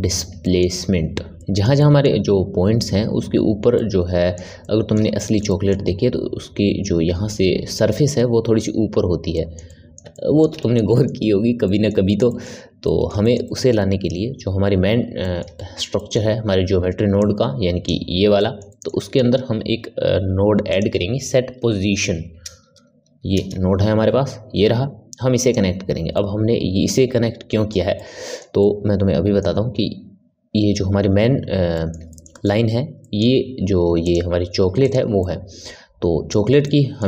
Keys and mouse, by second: 17.1-18.3 drag, 18.3-19.7 ctrl+middle drag, 19.7 shift+a, 26.1-31.6 middle drag, 31.7-34.0 middle drag, 34.0 click, 34.7 click, 35.1-37.0 middle drag.